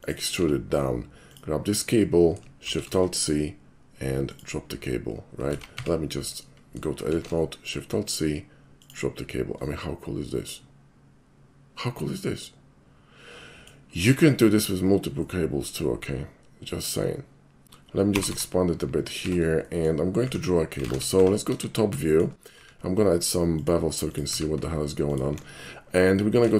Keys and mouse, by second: 0.0 click, 0.4 Tab, 1.3 click, 2.7 alt+shift+c, 4.3 click, 5.5 ctrl+z, 5.7 Tab, 7.1 alt+shift+c, 8.8 click, 9.6-13.7 middle drag, 15.3-17.6 middle drag, 17.9 Tab, 18.1 g, 18.3 y, 19.1 click, 19.3 Tab, 19.6 middle click, 20.1 middle click, 21.2 2, 22.0 shift+middle click, 22.5 q, 23.5 click, 24.1 click, 25.1 alt+click.